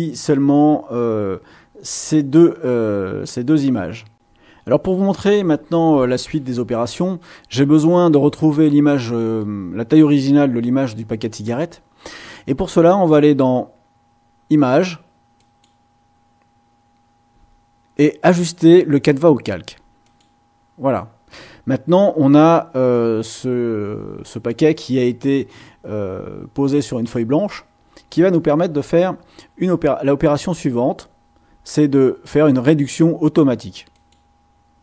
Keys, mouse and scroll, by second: 4.1 middle click, 7.0-8.1 middle drag, 15.4 click, 20.0 click, 33.9 click.